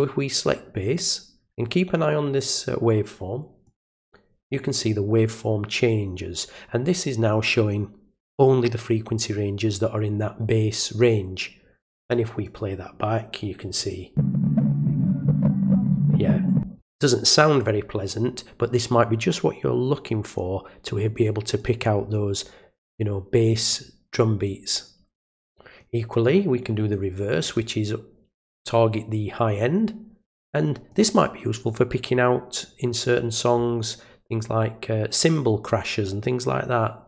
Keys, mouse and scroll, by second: 3.6 click, 8.4-12.0 drag, 12.4 click, 13.7 click, 19.3-20.3 drag, 21.5 click, 22.9 click, 24.4 click, 25.7 click, 26.2 right click, 27.4 click, 28.6-30.4 drag, 30.9 click, 33.1-35.7 drag.